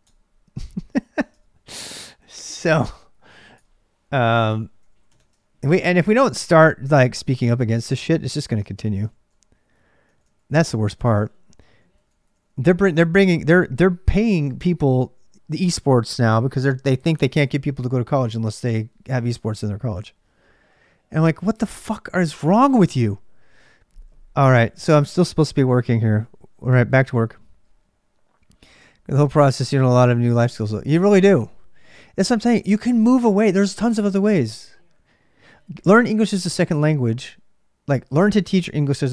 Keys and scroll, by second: 0.0-39.1 typing, 3.3 Return, 8.5 ctrl+a, 9.8 ctrl+a, 10.0 ctrl+a.